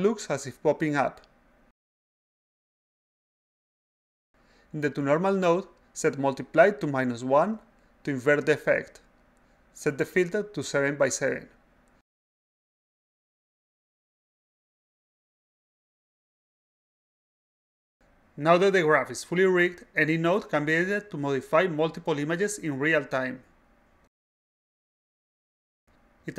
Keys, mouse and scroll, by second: 0.7 a, 0.7-2.3 drag, 2.3 s, 2.5-4.4 drag, 5.8 click, 6.0 click, 7.1 click, 8.6 1, 10.8 click, 12.4 click, 13.2 a, 13.7-15.5 drag, 13.7 s, 17.8 click, 18.5 click, 19.3-21.1 typing, 21.8-24.0 drag, 24.5 click, 25.8 click.